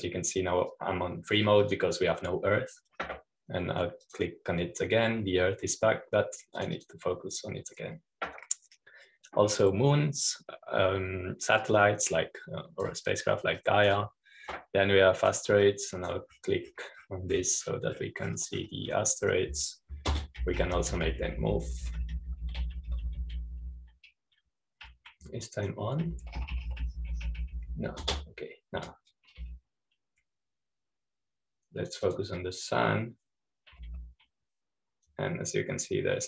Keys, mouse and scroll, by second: 2.6-4.7 drag, 6.0-7.9 drag, 8.5-10.8 drag, 14.1-22.2 drag, 22.5-26.3 typing, 28.0-30.1 typing, 31.4-32.0 typing, 33.7-35.1 drag, 33.7 typing.